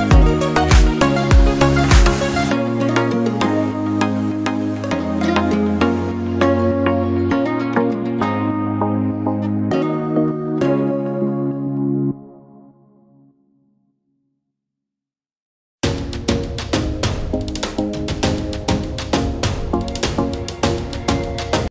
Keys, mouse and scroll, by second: 0.3 scroll down 1, 1.3 click, 2.4 scroll down 1, 3.2-4.7 drag, 7.8-11.6 alt+shift+drag, 13.6-21.7 alt+shift+drag.